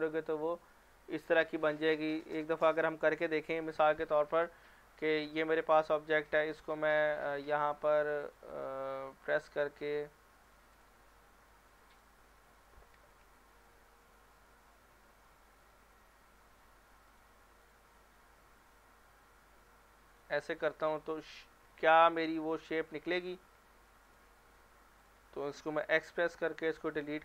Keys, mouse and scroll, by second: 3.2 click, 4.3 middle click, 5.1 scroll up 1, 5.3 Tab, 6.8 click, 7.2 middle click, 8.2 ctrl+click, 8.7-10.2 middle drag, 10.4 click, 11.1 middle click, 11.9 shift+click, 12.2 middle click, 13.2 alt+e, 15.6 click, 19.0 e, 20.1 click, 20.4 scroll down 1, 20.5-21.4 middle click, 22.7 click, 23.0 middle click, 24.1 shift+click, 24.4 middle click, 25.0 shift+click, 25.8 x.